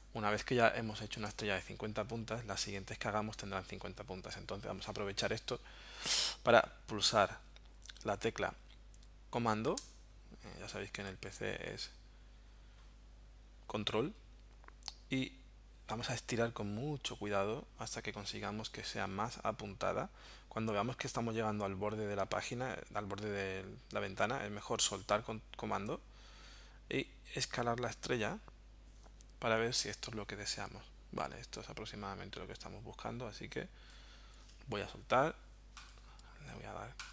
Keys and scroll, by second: 1.2 BackSpace.